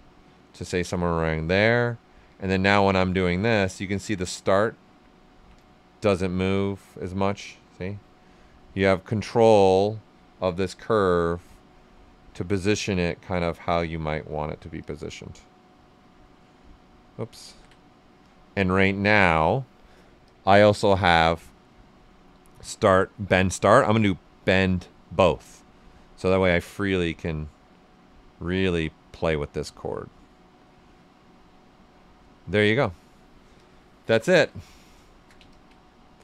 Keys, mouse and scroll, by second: 0.9 right click, 2.1-5.0 drag, 5.0 ctrl+right click, 6.5-11.3 drag, 11.3 right click, 12.2-17.4 drag, 17.4 ctrl+z, 18.2 click, 20.2 click, 23.7 click, 26.3 click, 26.4-30.4 drag, 30.4-33.5 right drag, 33.5 click, 34.1 alt+right click, 34.7 shift+f, 35.4 ctrl+click, 35.9 right click.